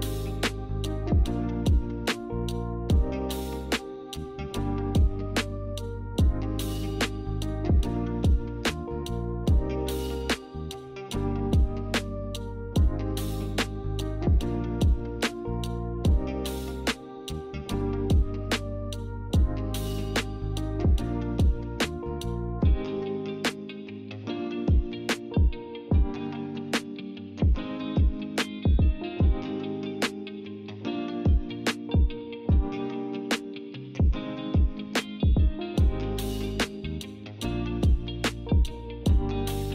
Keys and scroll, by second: 5.1-7.8 typing.